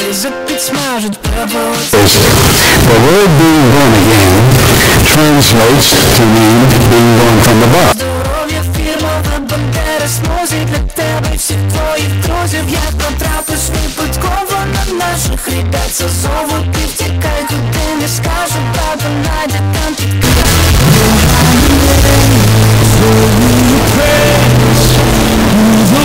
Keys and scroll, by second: 7.9 Page_Down.